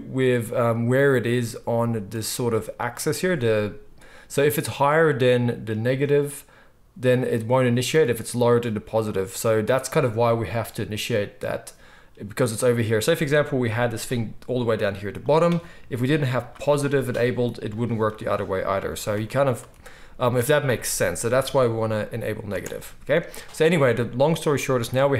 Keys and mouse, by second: 8.8-20.3 right drag, 13.6 g, 16.3 click, 16.3 middle click, 17.6 click, 17.6 middle click, 19.1 ctrl+z, 19.5 ctrl+z, 20.1 ctrl+z, 20.3-25.1 drag, 22.5 space.